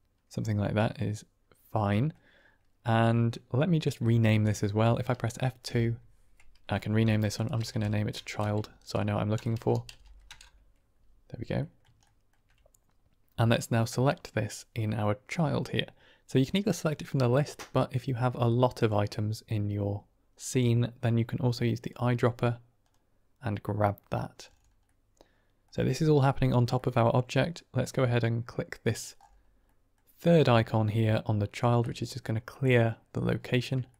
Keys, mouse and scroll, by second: 0.0-2.0 drag, 5.6 F2, 8.2 BackSpace, 11.5 drag, 12.0 shift+click, 16.5-18.8 drag, 24.8-25.6 drag, 26.6 middle drag, 29.7 middle click, 31.7 click, 33.3 middle drag, 33.8-33.9 shift+middle drag.